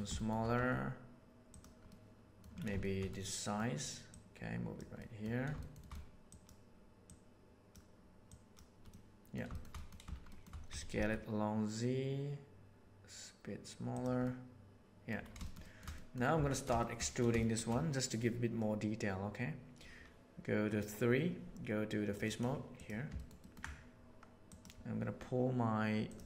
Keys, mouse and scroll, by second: 0.1 shift+middle drag, 0.5 s, 1.9-2.4 middle drag, 2.7 shift+middle drag, 3.2 middle drag, 4.1 middle click, 4.4 right click, 4.9 middle click, 5.5 shift+middle click, 6.3 right click, 7.1 right click, 8.2 right click, 8.9-9.2 middle drag, 9.5 shift+middle click, 9.7 middle drag, 10.2 shift+middle click, 10.6 s, 14.2-15.1 middle drag, 15.3 shift+middle drag, 15.5 shift+middle click, 15.9 middle click, 16.3 Tab, 16.7 middle click, 17.3 shift+middle click, 22.1 middle click, 22.7 middle click, 23.1 ctrl+middle click.